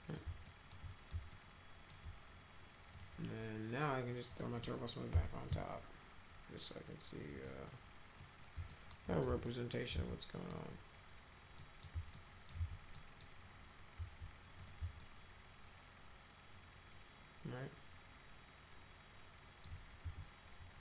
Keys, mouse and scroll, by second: 0.1 click, 0.5 alt+middle click, 0.9 middle click, 1.3 alt+middle click, 2.9 click, 4.3 click, 5.1 t, 7.3 click, 8.2 middle click, 8.7 alt+middle click, 9.1 click, 9.5 alt+middle click, 9.9 z, 10.3 middle click, 11.6 middle click, 12.1 alt+middle click, 12.6 z, 13.0 middle click, 14.6 click, 15.0-19.6 alt+middle drag, 20.0 c.